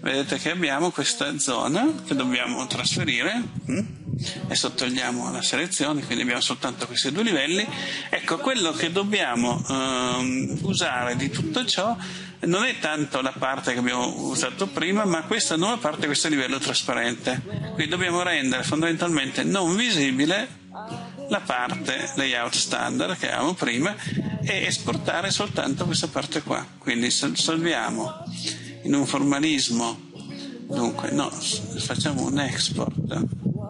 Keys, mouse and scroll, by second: 7.2 click.